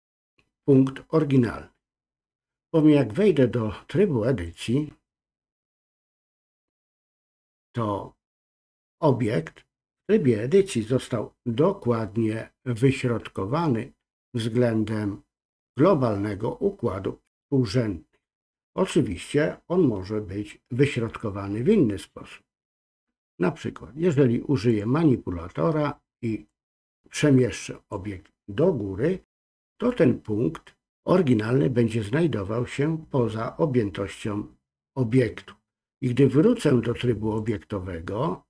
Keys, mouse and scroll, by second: 4.5-6.0 drag, 24.7 click, 26.5 click, 26.7-28.0 drag, 37.4-38.4 drag.